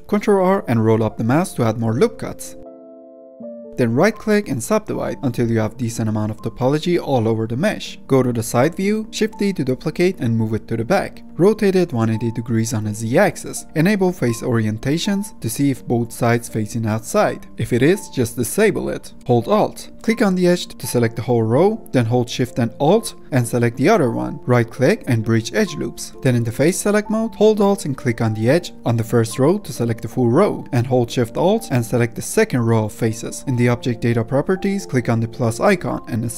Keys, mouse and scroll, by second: 0.0 ctrl+r, 0.3 ctrl+r, 1.8 ctrl+r, 2.8-3.3 middle drag, 3.3 a, 3.7-5.9 right drag, 5.9-7.6 middle drag, 7.6 2, 8.0 Tab, 9.6 shift+d, 11.3 ctrl+m, 13.8-15.5 drag, 15.5-17.3 middle drag, 17.3 F10, 17.6-19.1 drag, 19.1 Tab, 20.7 2, 21.3 alt+click, 23.4 alt+shift+click, 24.1-25.8 right drag, 25.8 Tab, 27.4 3, 30.1 alt+click, 32.7 alt+shift+click, 33.9-35.3 middle drag, 35.3-36.3 drag.